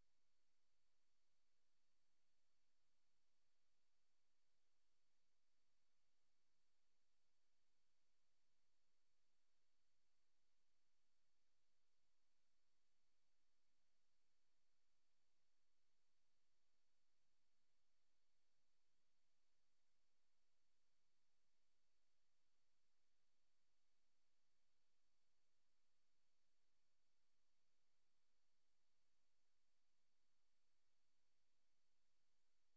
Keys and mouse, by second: 0.0 click, 1.1 click, 2.9 click, 4.6 ctrl+z, 9.9 click, 11.5 click, 12.1 click, 12.8 click, 13.7 click, 14.1 click, 14.9 click, 15.4 click, 16.2 click, 17.0 click, 18.4 click, 19.4 click, 20.4 click, 21.3 click, 21.7 click, 22.6 click, 23.7 click, 24.4 click, 25.3 click, 25.5 click, 25.8 click, 26.0 click, 26.5 click, 26.8 click, 27.0 click, 28.1 click, 28.3 click, 28.7 click, 29.0 click, 29.3 click, 29.8 click.